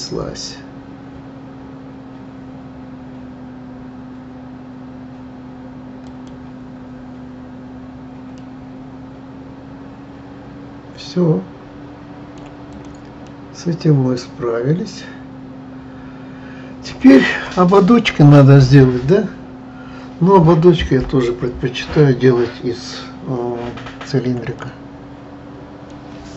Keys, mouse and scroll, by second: 8.3-11.4 middle drag, 12.7 click, 13.2-16.2 middle drag, 24.5-26.3 middle drag.